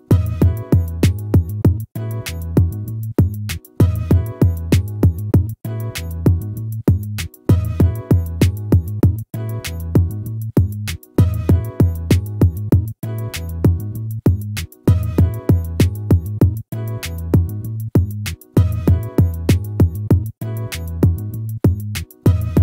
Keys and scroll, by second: 12.7 ctrl+-, 16.3 ctrl++, 22.0 ctrl++.